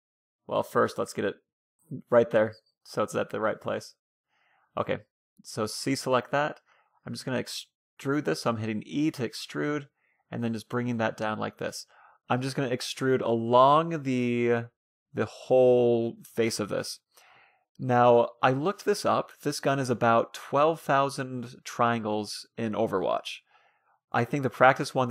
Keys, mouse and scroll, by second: 0.0 a, 0.4 a, 0.6 g, 4.0 a, 4.3 c, 5.1 e, 7.5-11.4 typing, 12.4 e, 13.6 e, 14.4 e, 16.1 e, 17.9 e, 19.4 middle click, 19.9 e, 21.9 middle click, 23.0 e, 23.2-24.2 middle drag, 24.7-25.1 middle drag.